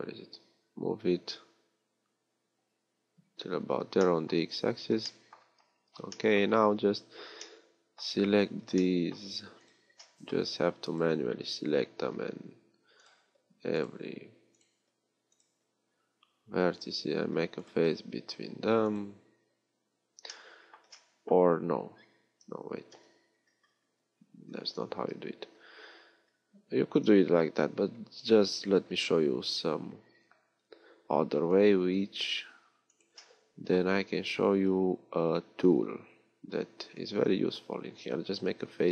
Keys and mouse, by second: 12.2 f, 18.2 f, 23.5 ctrl+z, 24.0 ctrl+z, 28.1 a, 32.2 b, 34.2 b.